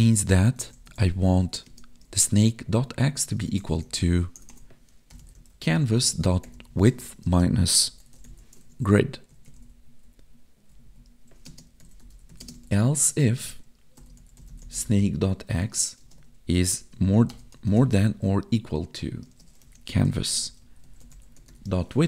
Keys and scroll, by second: 1.7 space, 2.0 space, 6.8 space, 7.2 space, 8.6 ctrl+s, 9.3 Left, 9.4 Right, 9.6 Left, 10.8 Down, 11.4 space, 12.4 space, 13.2 space, 16.0 space, 19.2 space.